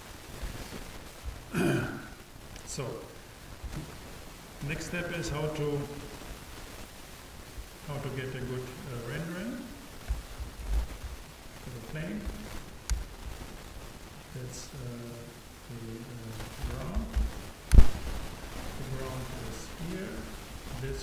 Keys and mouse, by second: 0.5 t, 5.3 shift+a, 10.1 n, 11.3-12.9 drag, 14.2-17.1 drag.